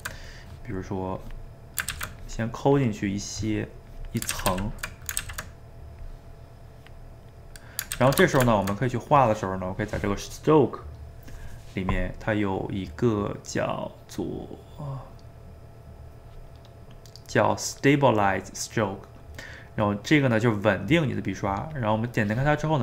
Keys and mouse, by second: 1.2 click, 1.9 ctrl+z, 2.2 click, 3.2 middle click, 3.9 click, 4.3 ctrl+z, 4.5 ctrl+z, 4.9 middle click, 5.2 ctrl+z, 6.0-7.2 drag, 7.2 middle click, 8.0 ctrl+z, 8.3-10.1 shift+middle drag, 10.1-13.2 drag, 22.7 middle click.